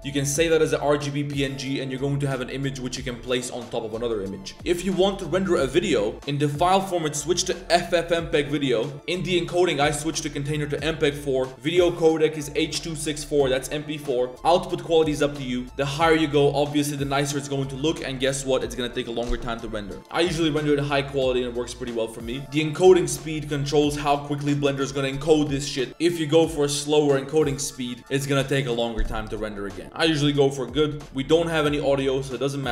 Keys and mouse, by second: 5.8 click, 6.4-8.5 drag, 9.7 click, 10.0-10.8 drag, 13.3 click, 15.6-21.1 drag, 22.9-30.8 drag.